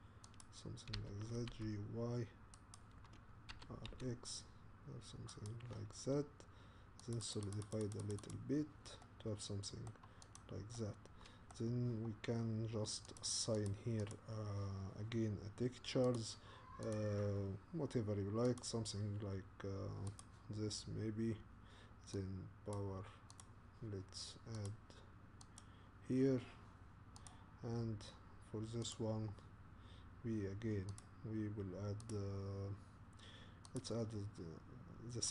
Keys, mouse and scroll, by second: 1.0 g, 3.4 middle click, 3.5 r, 4.6 middle click, 7.1-9.0 drag, 9.0-10.4 middle drag, 10.4 click, 10.7-13.2 middle drag, 13.2 click, 13.7 click, 14.1 click, 17.0 click, 20.2-23.6 drag, 25.4 click, 27.3 click, 28.9-33.6 drag, 33.9-35.3 drag.